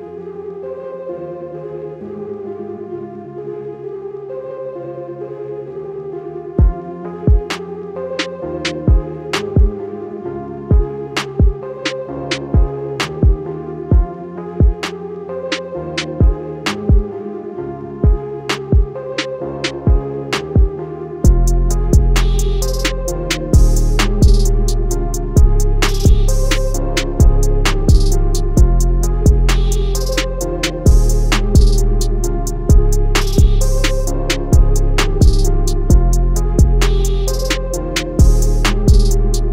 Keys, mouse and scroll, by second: 0.5 a, 0.8 click, 4.5 click, 5.1 typing, 5.8 click, 13.2 click, 16.7 a, 17.0 click, 18.7-19.3 typing, 20.1 click, 20.7 typing, 21.4 click, 22.0 a, 22.2 click, 30.0 a, 30.3 click, 36.7 click.